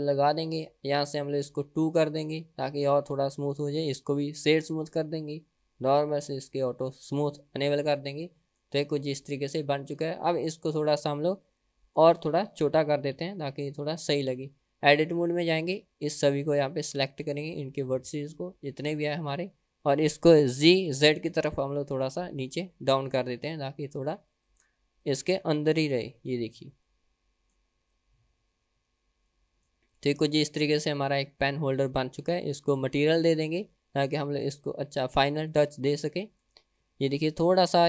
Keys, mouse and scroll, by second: 0.2 middle click, 1.9 click, 3.7 right click, 6.0 click, 7.3 click, 8.0-8.7 middle drag, 9.2 click, 9.9-10.2 drag, 10.4-11.0 middle drag, 11.6-12.1 middle drag, 13.2 KP_1, 14.4 Tab, 16.9 click, 17.8-19.3 drag, 20.6 g, 25.0 click, 25.4 Tab, 25.8 middle click, 26.6 scroll up 2, 27.0-27.8 middle drag, 27.8 scroll down 1, 28.0-29.8 middle drag, 29.8-30.2 scroll down 2, 30.2-30.9 middle drag, 31.2 click, 31.6-32.7 middle drag, 33.0-33.5 middle drag, 33.8-34.3 scroll down 2, 34.3 middle click, 34.8 scroll up 2, 35.3-35.7 shift+middle drag, 35.9-36.6 middle drag, 37.0-37.4 shift+middle drag, 37.6-37.8 scroll up 1.